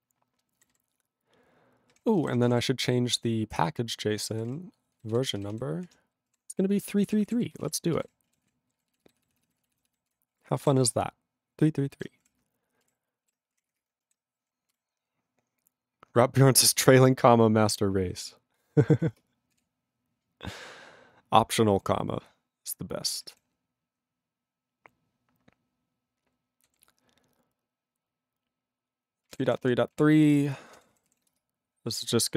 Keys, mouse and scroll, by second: 1.9 q, 3.7 ctrl+Return, 4.3 ctrl+n, 4.4 ctrl+e, 4.5 ctrl+n, 4.9 ctrl+b, 5.8 ctrl+d, 6.3 3, 6.6 ctrl+e, 6.9 ctrl+=, 7.5 ctrl+space, 7.6 ctrl+a, 8.0 ctrl+e, 8.5 ctrl+s, 8.7 ctrl+b, 10.1 ctrl+g, 10.3 ctrl+a, 10.8 ctrl+s, 12.8 ctrl+g, 13.8 Return.